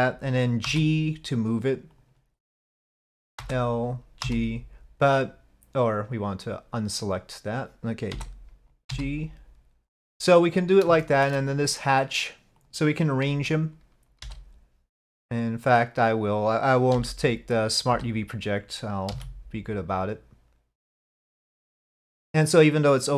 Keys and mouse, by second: 0.7 g, 3.5 l, 4.3 g, 8.2 l, 8.9 g, 11.2 shift+middle click, 14.3 l, 17.0 l, 18.0 l, 19.1 g.